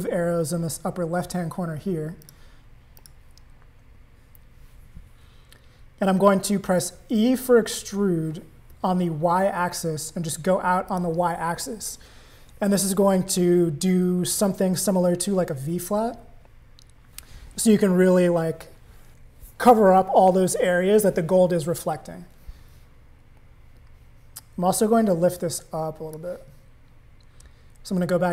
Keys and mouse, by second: 2.2 click, 3.0 click, 7.4 e, 15.0 Tab, 25.3 click.